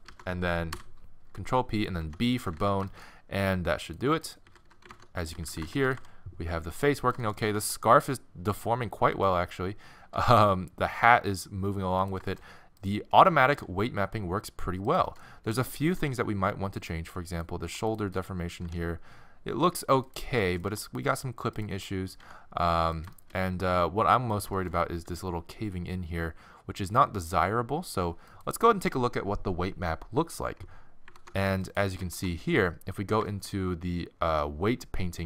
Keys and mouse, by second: 0.0 ctrl+Tab, 0.0 ctrl+z, 0.1 ctrl+p, 2.0 ctrl+Tab, 2.3 z, 3.9-4.9 middle drag, 4.1 z, 4.4 z, 4.9 ctrl+Tab, 4.9-5.8 drag, 5.3 z, 5.8-7.2 middle drag, 5.9 r, 7.5 r, 10.1 r, 12.8-13.5 middle drag, 13.5-15.1 drag, 13.5 r, 16.0 r, 17.7 r, 18.7 r, 20.7 r, 22.2 r, 24.3-26.3 middle drag, 25.1 r, 31.1 ctrl+Tab, 31.7-32.1 drag, 32.1 ctrl+Tab, 33.0-33.4 drag.